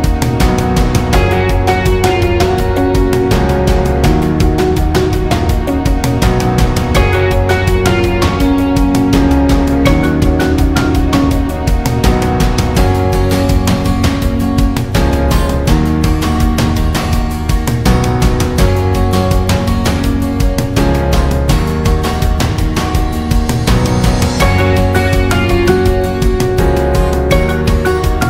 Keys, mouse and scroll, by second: 2.1 Escape, 5.1 click, 6.0 Escape, 7.3-10.6 drag, 10.7 Escape, 13.3 click, 16.6-18.6 drag, 18.7 Escape, 19.6-25.6 drag.